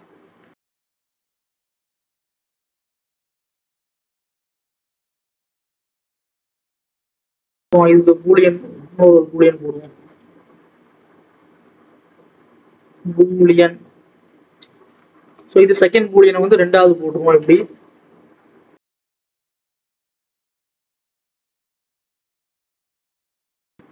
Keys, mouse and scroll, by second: 0.2 Tab, 0.5 alt+a, 1.1 shift+a, 1.2 scroll down 1, 1.4 Tab, 1.6 s, 2.3 Tab, 2.7 g, 4.2 click, 4.9 g, 6.7 click, 7.1 ctrl+z, 8.0 click, 13.4-18.9 drag, 20.1 click, 20.4 click, 20.6 Tab, 20.8 s, 22.9 Tab, 23.2 click, 23.6 click.